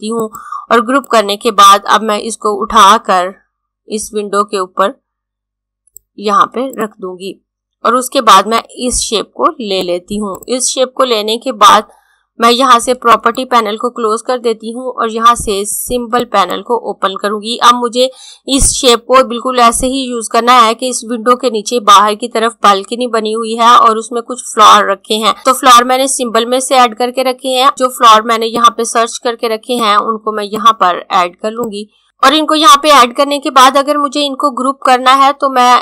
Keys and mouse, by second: 12.8 click, 15.8 click, 27.7 click.